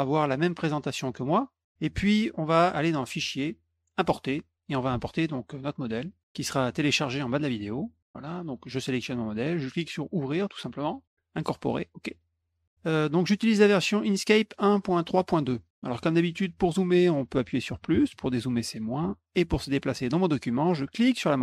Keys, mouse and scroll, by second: 1.2 click, 3.1 click, 3.9 click, 6.1 click, 7.8 click, 10.0 click, 12.1 click, 13.2 click, 13.9 click, 21.0-21.4 middle drag.